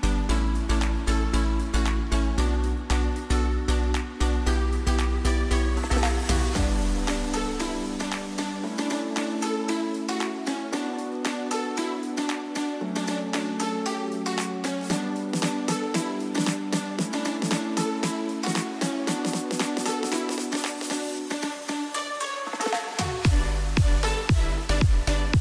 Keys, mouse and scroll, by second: 4.8-9.6 drag, 9.6 click, 14.7-19.9 drag, 21.7 click.